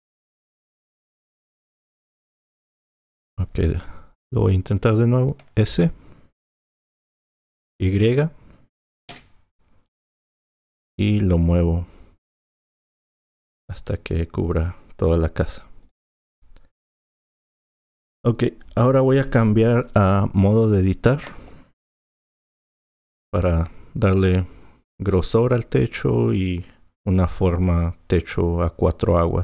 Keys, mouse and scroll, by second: 1.6 click, 6.7 s, 16.9 click, 23.0 Tab.